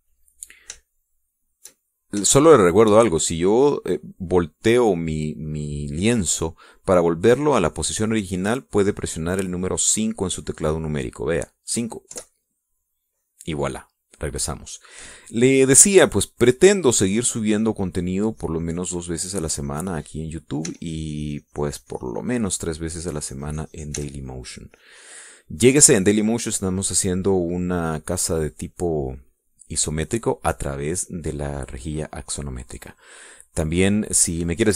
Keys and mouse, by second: 2.6 shift+click, 4.2-6.0 shift+drag, 13.9 KP_5, 15.8-16.8 middle drag, 18.5-19.9 drag, 20.1 click, 21.0-22.0 drag, 22.4 e, 22.5-24.5 drag, 24.7-25.9 drag, 25.8 e, 26.0-27.0 drag, 31.2 middle click, 32.1-33.7 middle drag, 33.8-34.7 middle drag.